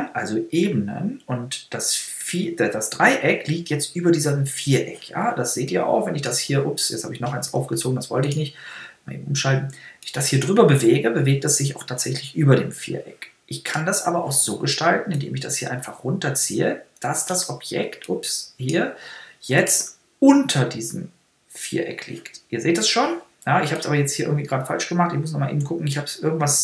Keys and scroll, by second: 7.7 super+z.